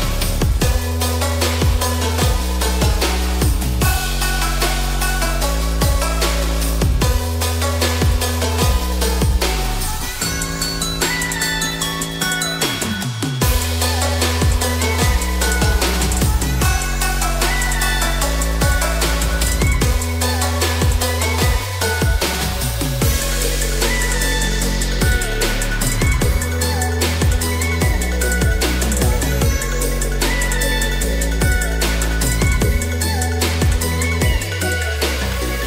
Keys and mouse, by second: 2.8 alt+e, 12.0 Tab, 12.0 middle click, 13.4-13.9 shift+middle drag, 14.5-15.9 middle drag, 17.3 click, 17.7-21.2 middle drag, 22.4-23.0 middle drag, 23.4 s, 27.1-27.7 drag, 28.1-28.5 shift+middle drag, 28.7-29.9 middle drag, 30.6-31.1 shift+middle drag, 31.6 click, 34.2-34.6 shift+middle drag, 35.2 s.